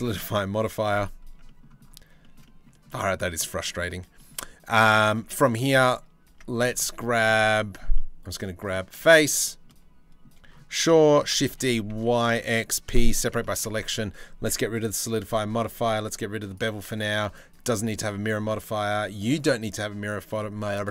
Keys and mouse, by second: 2.4 middle drag, 2.7 shift+middle drag, 3.1 middle drag, 3.6-4.5 shift+middle drag, 5.8 Tab, 6.2 middle click, 6.4 3, 10.8 shift+d, 12.4 p, 13.2 Tab, 16.1 click, 16.9 click, 19.2 click, 20.2 click, 20.7 drag.